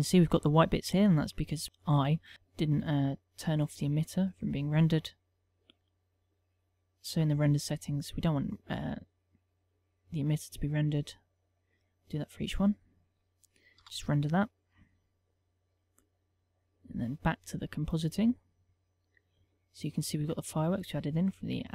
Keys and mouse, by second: 1.6 click, 2.3 click, 3.0 middle click, 3.7 click, 5.0 middle click, 5.6 middle click, 5.9 middle click, 6.4 middle click, 7.9 click, 10.5 click, 11.4 click, 12.3 click, 13.2 click, 14.5 F12, 17.5 click.